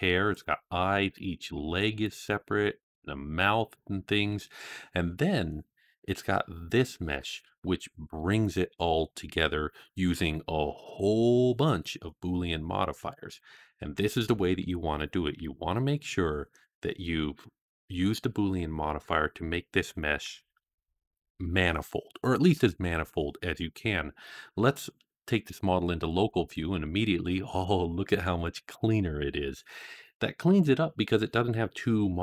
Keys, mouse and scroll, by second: 0.2 click, 0.8 click, 1.2 click, 2.6 click, 3.4 click, 11.1-12.6 scroll down 8, 12.6 scroll down 4.